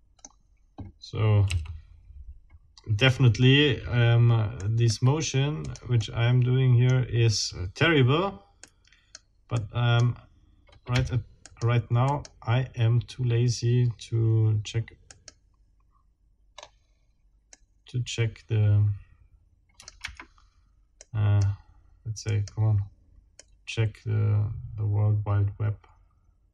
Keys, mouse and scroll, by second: 1.5 x, 4.6 right click, 5.7 click, 6.0-7.1 middle drag, 8.6-9.3 right drag, 9.5-10.2 right drag, 10.9 Escape, 11.4 right click, 12.1 right click, 15.1 right click, 16.5-16.9 scroll up 1, 17.5 middle click, 18.4-20.1 right drag, 20.0 Escape, 21.0 right click, 22.3 right click, 23.3-26.5 right drag.